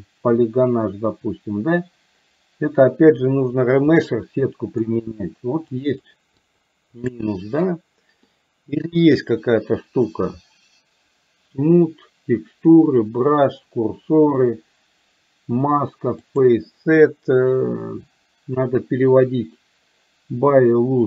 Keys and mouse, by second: 4.1 middle click, 5.8 click, 6.5 click, 7.1 click, 8.3 middle click, 16.3-21.0 drag.